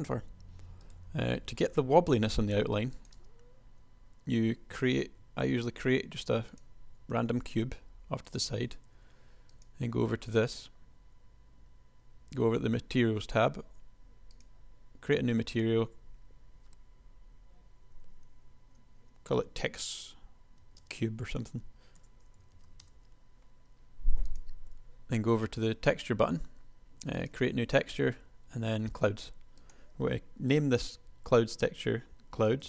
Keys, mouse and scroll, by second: 1.9 KP_1, 3.3 space, 5.2 shift+a, 7.7 g.